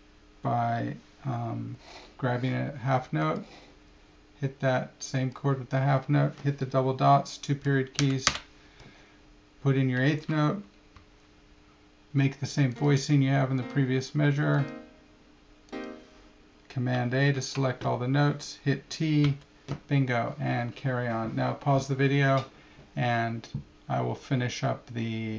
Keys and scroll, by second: 17.3 super+a, 21.0 t.